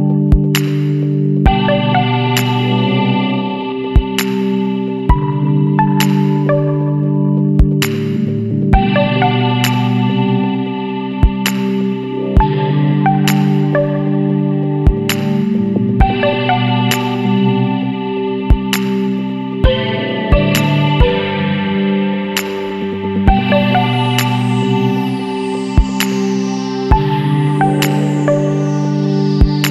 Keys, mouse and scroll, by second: 1.8 click, 4.3 click, 7.0 click, 9.2 click, 10.5 click, 12.9 click, 14.2 click, 16.3 click, 18.2 click, 19.8 click, 21.4 KP_Subtract, 21.7 KP_1, 22.1 KP_Enter, 24.3 click, 25.4 KP_1, 25.8 KP_Enter, 28.6 click.